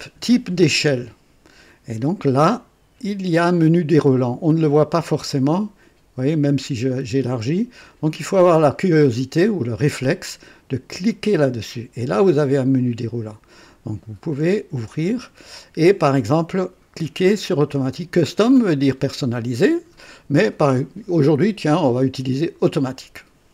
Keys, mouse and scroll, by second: 5.1-10.2 drag, 11.1 click, 14.3 click, 22.5 click.